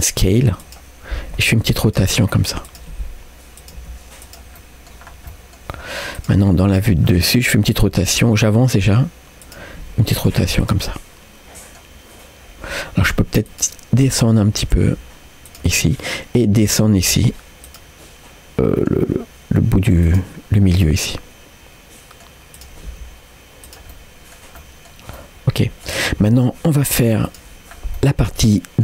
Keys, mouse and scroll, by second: 4.6 middle click, 5.1 scroll down 1, 5.3 middle click, 5.8-6.3 scroll up 2, 6.2 click, 6.4 middle click, 7.1 middle click, 8.0 g, 9.9 r, 10.9-11.9 middle drag, 13.5 click, 14.2 click, 14.6 g, 15.8 middle click, 16.6 click, 17.0 g, 18.7 middle click, 20.1 click, 20.8-22.3 middle drag, 22.6 click, 22.9 g, 23.9 middle click, 24.6 middle click, 25.2 middle click, 27.3 click, 27.7 scroll down 1, 28.0 middle click.